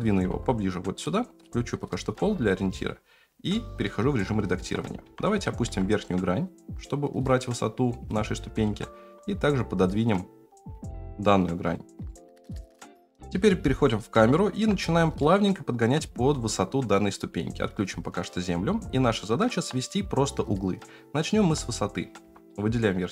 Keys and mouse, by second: 0.2 g, 1.7 click, 2.2 g, 3.5-3.8 middle drag, 4.6 Tab, 5.0 3, 5.3 click, 5.6 g, 8.1 click, 8.4 g, 12.0 shift+middle click, 12.9 F9, 12.9 KP_0, 14.3 shift+middle drag, 15.2-15.5 shift+middle drag, 17.7 click, 19.1 shift+middle drag, 20.7-21.4 drag, 21.4 Tab, 22.2 3.